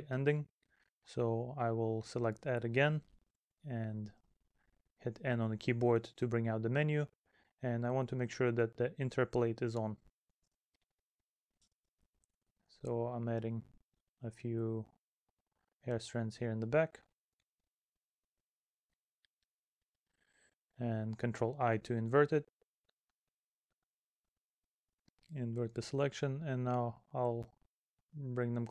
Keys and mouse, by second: 0.2 middle click, 1.6 middle click, 3.6 middle click, 4.3 middle click, 8.3 middle click, 9.6 middle click, 10.5 middle click, 11.9 middle click, 12.8 middle click, 14.2 middle click, 15.0 middle click, 15.6 middle click, 16.6 middle click, 18.0 middle click, 18.7 middle click, 19.7 middle click, 21.0 middle click, 22.3 middle click, 23.1 middle click, 25.0 middle click, 27.5 middle click, 28.5 middle click.